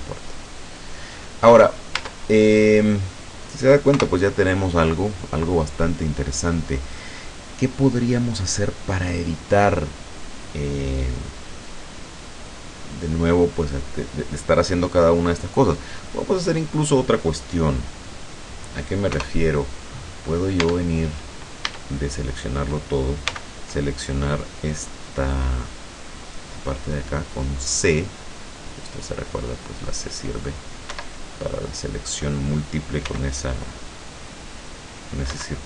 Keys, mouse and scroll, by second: 0.2 middle click, 1.0 middle click, 2.0 Tab, 2.4-2.8 scroll down 2, 3.0 click, 4.0 KP_0, 19.2 KP_0, 19.9 middle click, 20.7 Tab, 21.7 a, 23.3 c, 24.8-25.2 scroll up 1, 25.2-25.5 scroll down 1, 26.7-31.0 drag, 30.9 Escape, 31.3-32.5 middle drag, 33.1 c, 33.7-34.1 scroll up 1, 34.5-35.5 drag, 35.3 Escape.